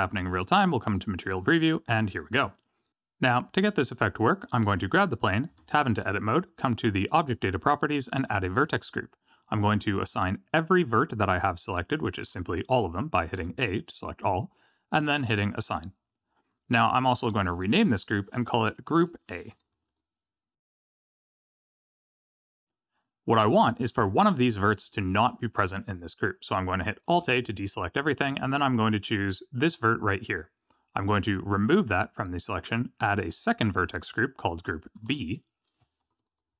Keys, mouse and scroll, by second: 0.1 z, 0.8 click, 5.5 Tab, 7.1 click, 8.5 click, 12.2 alt+a, 13.3 a, 15.5 click, 17.2 click, 17.4 click, 22.1 click, 27.2 alt+a, 29.5 click, 31.6 click, 33.2 click, 34.4 click, 34.5 click.